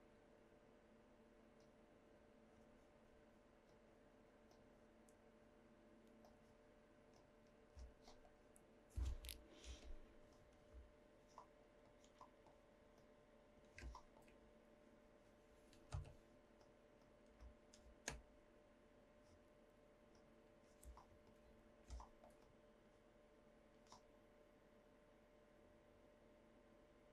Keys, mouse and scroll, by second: 1.6 click, 3.8 drag, 4.6-6.3 drag, 7.2 click, 9.6 Tab, 13.0 click, 15.9 n, 16.6 click, 17.0 click, 17.4 click, 17.8 z, 20.2 click.